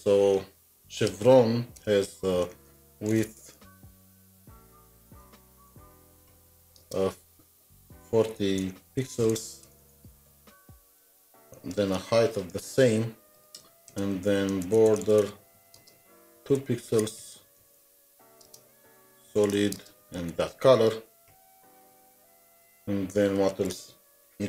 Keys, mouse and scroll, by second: 1.7 alt+Tab, 1.9 Return, 2.4-11.3 typing, 4.5 Insert, 11.7 alt+shift+Down, 13.4 Delete, 13.6 End, 13.9 Return, 14.0 End, 14.3-20.3 typing, 21.3 typing, 24.1 typing.